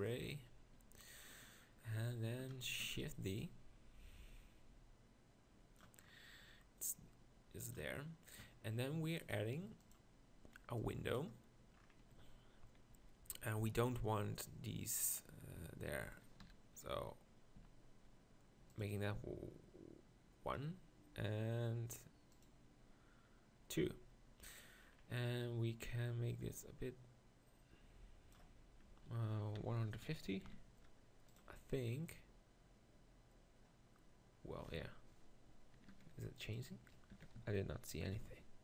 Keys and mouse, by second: 2.8 shift+d, 12.1 z, 12.9 z, 13.7 z, 15.5 z, 16.5 t, 17.6 z, 21.4 middle click, 23.5-24.2 drag, 36.5-38.6 drag.